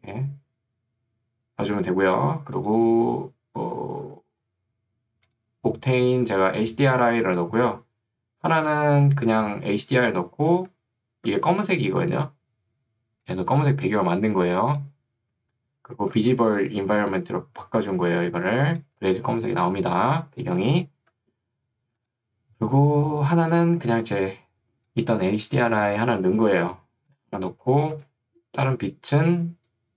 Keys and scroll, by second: 0.8 Escape, 8.5 ctrl+2, 10.7 Escape, 16.3 ctrl+2, 21.1 Escape, 23.5 ctrl+2, 27.9 Escape.